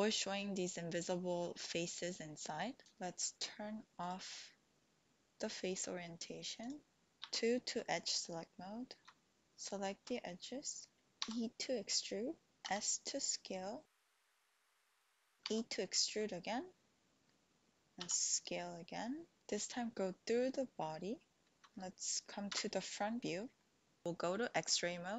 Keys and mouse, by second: 4.0-6.9 drag, 7.1 3, 7.2 2, 9.5 alt+shift+click, 11.2 e, 12.7 s, 15.6 e, 18.0 s, 22.4 KP_1, 23.6 shift+click.